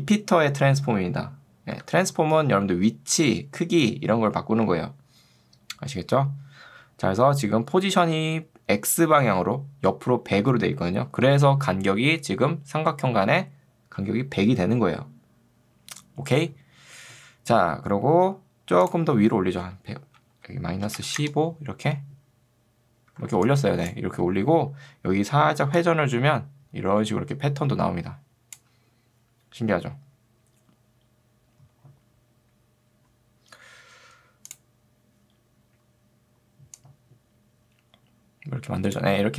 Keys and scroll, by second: 1.8 Escape, 11.6 ctrl+2, 16.4 Escape, 20.8-21.7 typing, 23.4 ctrl+2, 24.2 Escape.